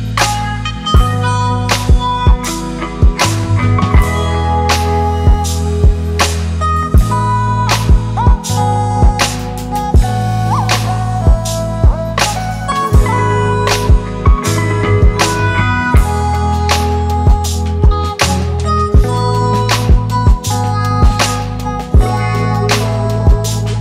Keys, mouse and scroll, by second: 1.1 ctrl+click, 3.4 ctrl+click, 11.0 ctrl+z, 12.0-12.9 typing, 13.6 double click, 15.1 ctrl+-, 15.3 ctrl+-.